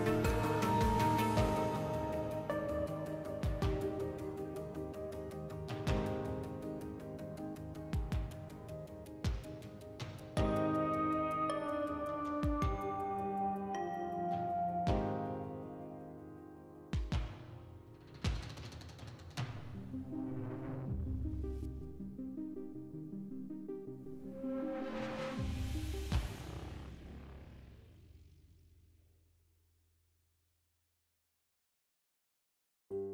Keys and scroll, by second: 3.6 0, 7.0 alt+e, 9.4 alt+q, 12.0 alt+e, 16.4 s, 25.2 2, 31.3 s.